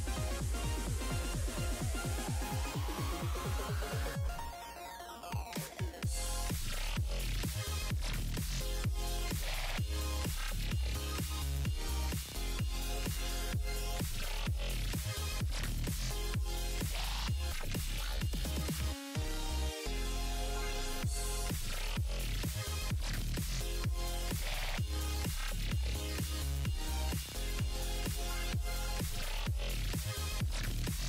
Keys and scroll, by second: 14.2 s.